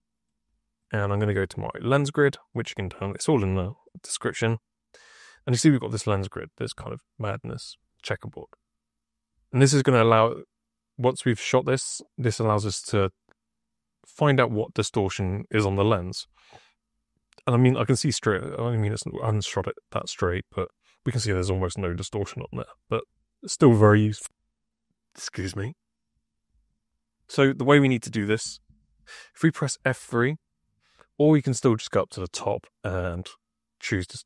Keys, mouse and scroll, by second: 0.1 click, 2.4 click, 3.5 click, 31.5 click.